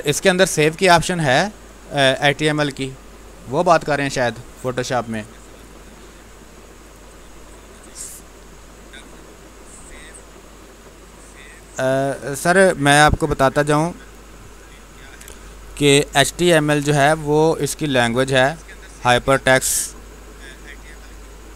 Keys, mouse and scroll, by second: 6.7 click, 11.4 click.